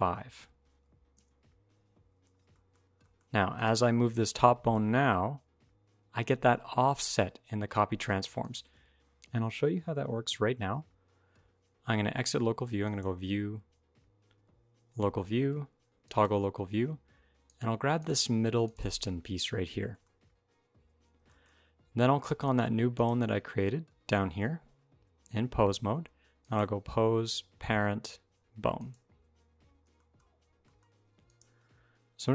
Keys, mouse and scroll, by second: 1.8-2.3 scroll down 4, 2.3 middle click, 2.6 scroll down 1, 3.0 shift+middle click, 3.3 click, 4.6 g, 8.6 alt+r, 8.6 alt+t, 8.7 alt+g, 9.0 middle click, 9.0-9.5 scroll up 1, 12.6 click, 17.2 click, 17.7 click, 18.4 click, 19.0 middle click, 19.8 shift+middle click, 19.9-20.9 scroll up 1, 21.0 shift+middle click, 21.3-21.7 scroll up 4, 22.2 shift+click, 23.0 shift+click, 26.2 click, 29.1-29.7 scroll down 9, 29.7 shift+middle click, 30.0-30.5 scroll up 3, 30.4 middle click, 31.0 click.